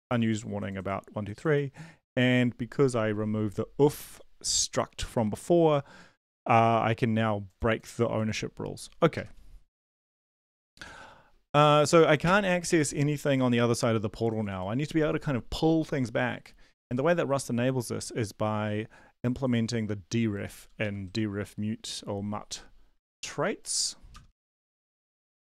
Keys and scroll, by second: 9.2 super+Left, 12.7 super+Up, 16.9 super+Left, 20.9 super+Up, 24.1 Return, 24.2 Return, 24.6 ctrl+v.